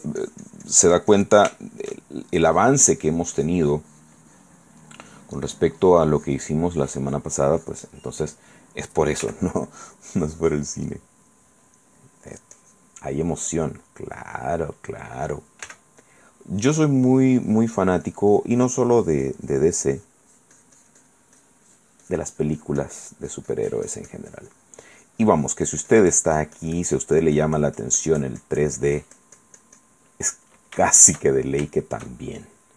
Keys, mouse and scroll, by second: 1.7 shift+middle click, 2.7 shift+click, 4.8 click, 5.1 middle click, 5.6-8.5 drag, 8.1 middle click, 8.1 right click, 8.7 middle click, 9.4 f, 9.9 click, 10.2 click, 11.5 middle click, 12.5 click, 13.2-14.5 middle drag, 13.5 click, 14.6 middle click, 15.8 f, 16.2 click, 16.7 click, 20.1-21.5 middle drag, 21.6 click, 30.5-32.7 middle drag.